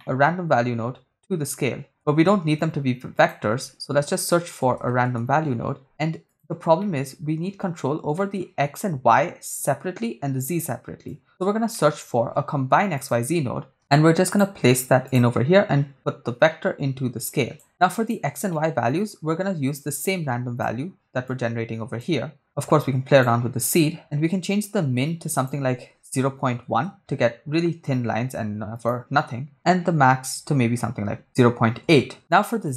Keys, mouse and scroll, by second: 0.0 middle click, 2.0 shift+a, 6.8 middle click, 8.2 middle click, 11.1 click, 11.8 middle click, 12.2 shift+a, 16.0-17.6 drag, 17.7 click, 18.5 middle click, 19.8-20.6 drag, 21.3-22.0 drag, 22.4-23.3 drag, 24.0 middle click, 25.4-26.7 drag, 28.7-30.4 drag, 31.2 click, 32.3 click.